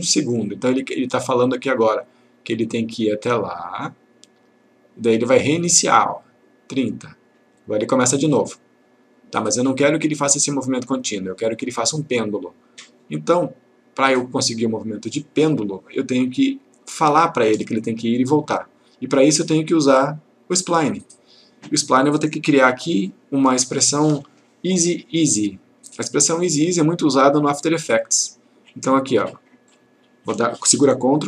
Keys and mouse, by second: 1.9-14.4 drag, 16.3-17.6 click, 29.4 click.